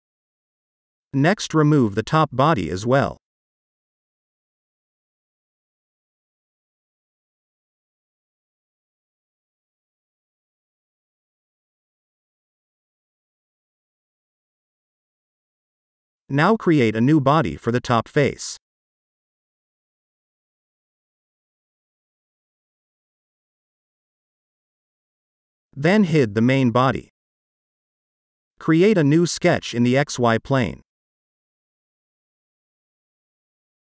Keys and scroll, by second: 1.0 Delete, 8.0 Delete, 11.8 space, 12.8 ctrl+s, 19.7 F2, 19.8-23.3 typing, 22.6 Return, 25.5 space.